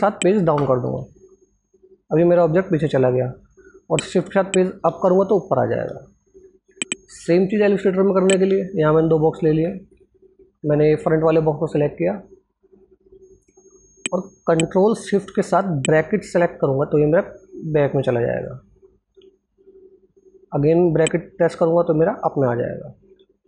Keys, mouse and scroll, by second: 0.1 shift+Page_Down, 3.9 shift+Page_Down, 4.4 shift+Page_Up, 6.3 click, 6.9 alt+Tab, 8.5 ctrl+alt+scroll up 1, 9.5 click, 14.2 ctrl+Num_Lock, 14.2 click, 15.7 ctrl+shift+[, 20.9 ctrl+shift+].